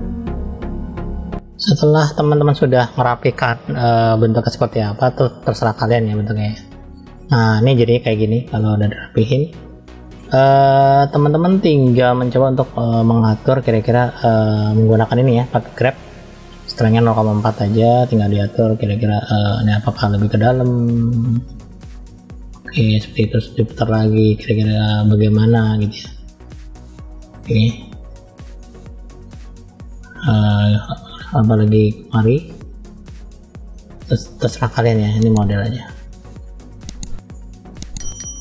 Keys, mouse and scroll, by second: 0.0 middle click, 0.0 click, 0.2 middle click, 0.4 click, 0.6 click, 0.6 middle click, 0.9 middle click, 1.3 click, 1.4 middle click, 1.8 middle click, 2.8 middle click, 3.5-6.1 middle drag, 6.4-7.5 middle drag, 8.0 middle click, 8.8-9.2 scroll up 1, 9.2 middle click, 10.2 middle click, 11.2 shift+middle click, 12.0 middle click, 14.0 click, 17.7 click, 19.0 scroll up 1, 19.1 middle click, 20.1 click, 20.7 click, 21.7 click, 22.4 click, 22.6 click, 23.1 middle click, 24.3 click, 24.8 click, 25.9 middle click, 26.8 click, 27.2 click, 27.5 click, 28.0 click, 28.5 middle click, 29.3-30.1 scroll down 2, 30.1 click, 30.6 click, 30.9 click, 31.1 click, 31.4 click, 31.6 click, 32.1 click, 32.4 middle click, 33.1 click, 33.6 middle click, 34.6 click, 35.0 click, 35.6 click, 35.8 middle click, 36.8 click, 37.1 click, 37.7 click, 38.1 click.